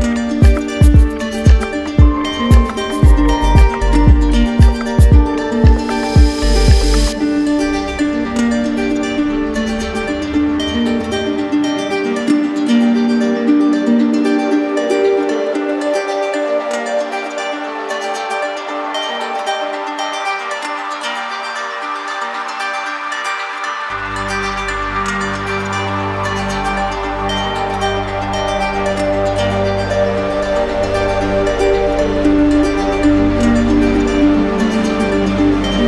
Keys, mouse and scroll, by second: 1.5 alt+click, 2.5 alt+click, 3.0 ctrl+click, 3.3 ctrl+click, 4.8 alt+click, 6.1 alt+click, 6.7 right click, 8.6 click, 8.8 ctrl+z, 9.5 right click, 10.4 click, 10.9 right click, 11.3 click, 11.7 shift+click, 12.4 click, 13.6 ctrl+z, 14.2 ctrl+z, 15.2 right click, 16.6 click, 17.0 right click, 18.6 click, 19.5 click, 20.1 right click, 21.8 alt+click, 22.3 shift+click, 22.7 shift+click, 23.1 shift+click, 24.1 right click, 24.6 right click, 25.1 shift+right click, 25.2 shift+right click, 25.7 right click, 26.1 alt+right click, 26.7 right click, 27.3 d, 28.6 d, 30.9 shift+click, 31.3 shift+click, 31.6 shift+click, 31.8 shift+click, 32.1 shift+click, 32.9 right click, 33.4 alt+right click, 34.1 d.